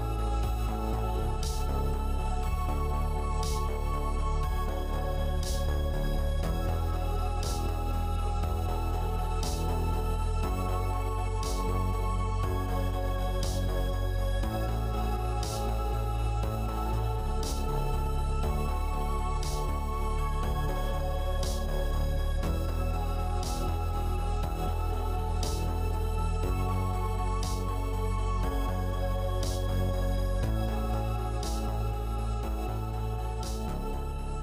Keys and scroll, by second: 7.7-8.7 typing, 11.7 3, 12.0 0.